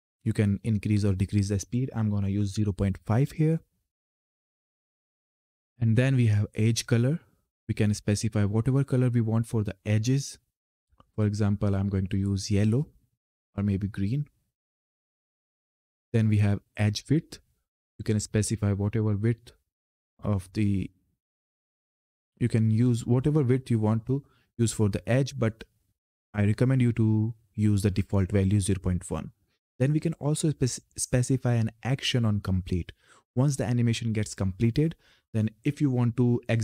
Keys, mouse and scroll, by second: 4.4 click, 11.7 click, 17.8 click.